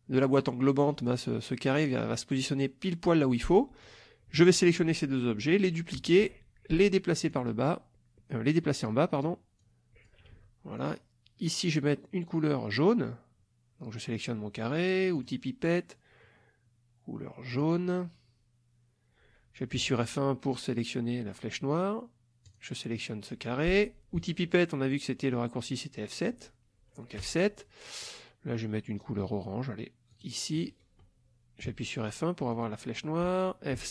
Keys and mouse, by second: 2.3 click, 3.2-3.8 middle drag, 4.4 shift+click, 6.0 ctrl+d, 7.3-9.0 drag, 9.1 click, 9.6-10.2 drag, 10.3 ctrl+z, 10.8 ctrl+click, 15.2 click, 17.5 click, 19.8 F1, 22.5 click, 27.2 F7, 30.1 click, 31.6 F1, 32.5 click, 33.8 F7.